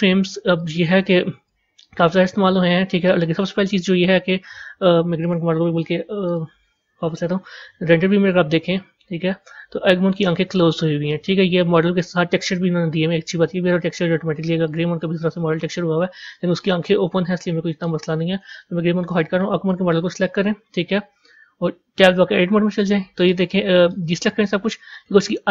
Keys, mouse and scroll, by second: 0.5-2.9 drag, 2.9-5.1 middle drag, 5.1 click, 6.2 click, 6.7-7.3 scroll up 3, 7.6 z, 9.7-10.4 scroll up 4, 10.4-13.4 middle drag, 14.6 click, 15.0 scroll down 1, 16.0-19.0 middle drag, 19.0 click, 19.6 click, 20.1 scroll up 5, 21.0-22.1 scroll up 2, 22.1 b, 23.2 middle click, 24.5-25.2 scroll up 3.